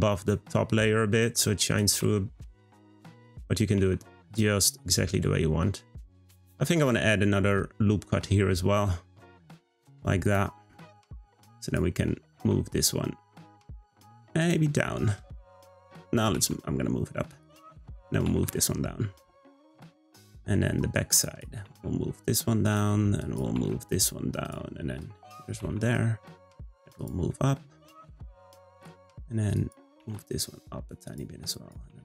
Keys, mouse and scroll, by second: 0.3-1.6 middle drag, 1.6 click, 1.9 g, 3.0 click, 3.7 g, 4.9-6.5 middle drag, 6.8 r, 10.2 click, 10.7 middle click, 11.6 click, 12.3 g, 14.7-16.3 middle drag, 16.3 g, 17.9 click, 18.2 g, 19.9-21.2 middle drag, 21.2 click, 21.6 g, 23.2 click, 23.5 g, 25.0 click, 25.5 g, 27.3-29.5 middle drag, 29.5 click, 29.9 g, 31.5 click, 31.8 g.